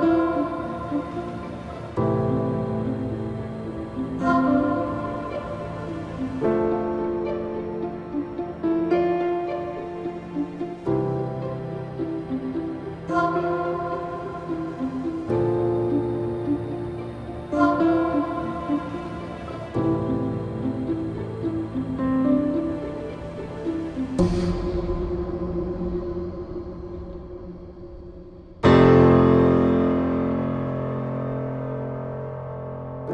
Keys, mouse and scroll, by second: 3.8 click, 7.4 right click, 9.1-15.1 drag, 17.1 alt+scroll up 1, 18.5-21.2 drag, 21.2 alt+scroll down 1, 23.5 click, 24.9 ctrl+t, 25.3 right click, 26.3 click, 27.1 alt+scroll up 1, 28.5-31.2 drag, 31.2 alt+scroll down 1, 31.5 space, 31.5 click, 31.8 space, 32.1-33.1 drag.